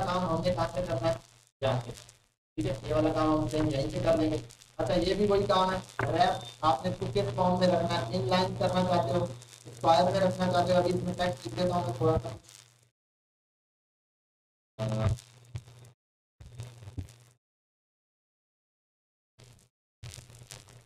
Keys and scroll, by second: 15.6 =, 16.0 r, 16.4 a, 18.9 d.